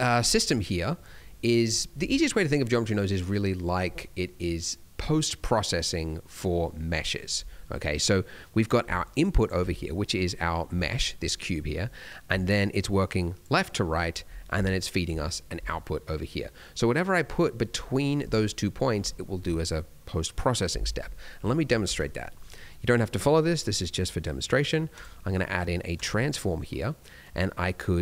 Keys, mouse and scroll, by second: 8.8 d, 8.9 click, 9.4 d, 10.7 Tab, 11.1 Tab, 12.2 d, 12.5 click, 13.4 d, 13.6 d, 13.6 click, 14.1 d, 14.5 d, 14.6 click, 15.5 d, 15.6 right click, 18.1 d, 26.2 scroll down 1, 26.4 middle click, 26.7-27.2 scroll up 1, 27.2 click.